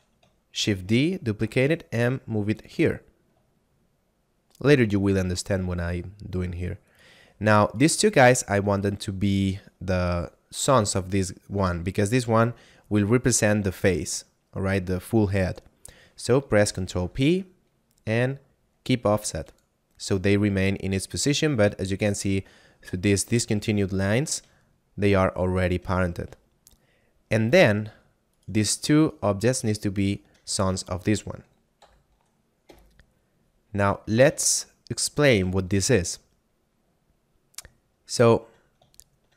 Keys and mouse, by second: 0.6 shift+d, 1.4 y, 2.6 click, 3.0 middle click, 3.6 shift+middle click, 5.2 middle click, 6.8 right click, 7.6 shift+right click, 8.7 shift+right click, 17.0 ctrl+p, 19.2 click, 21.2 right click, 23.2 middle click, 24.7 shift+middle click, 26.0 middle click, 28.3 right click, 29.0 shift+right click, 30.0 shift+right click, 31.8 ctrl+p, 32.5 Return, 34.1 a, 34.8 shift+middle click, 35.6 middle click, 37.8 shift+middle click, 39.0 shift+middle click.